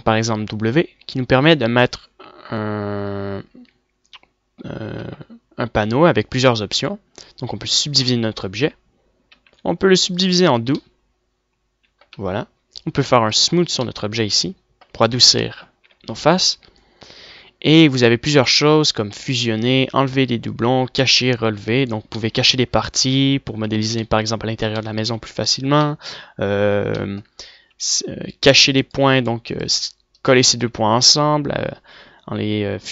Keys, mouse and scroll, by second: 1.7 w, 10.5 w, 11.8 middle click, 13.3 Tab, 16.1 Tab, 16.9 w, 23.2-24.5 middle drag, 25.3 middle click, 25.7 middle click, 26.4 middle click, 27.3-28.8 middle drag, 29.8-30.9 drag, 31.9 w, 32.4 w.